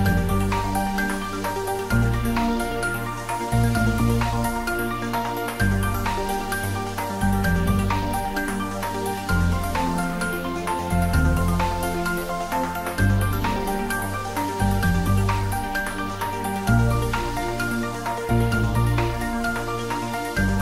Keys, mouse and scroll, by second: 0.3 Return, 1.1 click, 1.4 ctrl+s, 2.1 click, 3.6 ctrl+l, 4.4 click, 5.4 middle click, 6.5 ctrl+l, 8.1 click, 8.5 middle click, 9.2 click, 13.5 middle click, 14.4 ctrl+middle click, 15.3 middle click, 16.1 ctrl+middle click, 17.1 click, 18.4-19.7 ctrl+middle drag, 19.7 ctrl+a, 20.0 click.